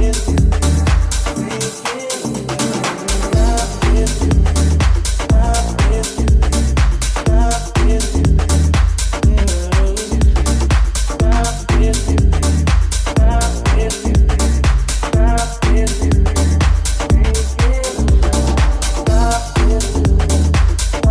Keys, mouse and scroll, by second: 0.8-6.7 ctrl+drag, 2.8 alt+shift+right click, 3.4 alt+right click, 4.0 right click, 4.5 ctrl+KP_Add, 5.1 s, 6.7-18.0 middle drag, 6.7 g, 12.7 g, 14.7 Tab, 14.9 w, 18.0-21.1 ctrl+drag.